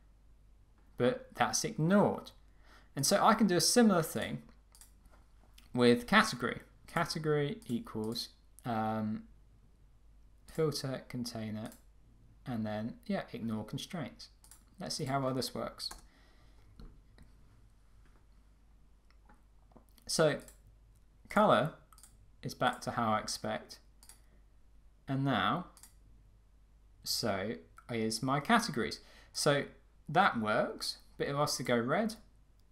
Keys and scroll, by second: 15.9 Return.